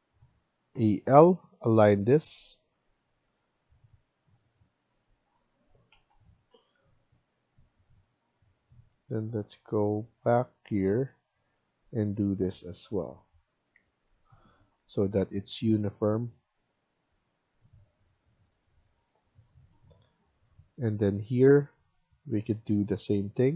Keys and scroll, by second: 0.6-1.1 typing, 5.9 ctrl+z, 6.4 Escape, 6.6 Escape, 10.7 Escape, 12.6 Escape, 13.6 Escape.